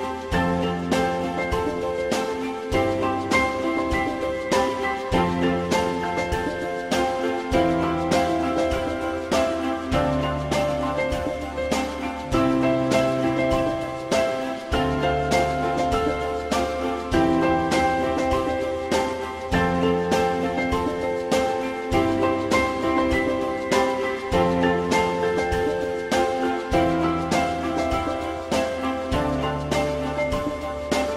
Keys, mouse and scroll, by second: 5.1 alt+middle click, 15.1 alt+middle click, 27.8 alt+middle click.